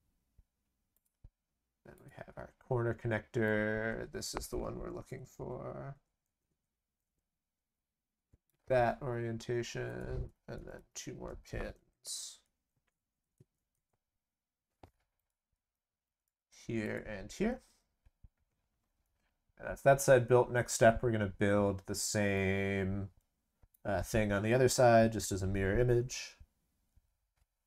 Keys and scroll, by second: 10.6 ctrl+c, 10.7 ctrl+v, 16.0 ctrl+c, 16.2 ctrl+v.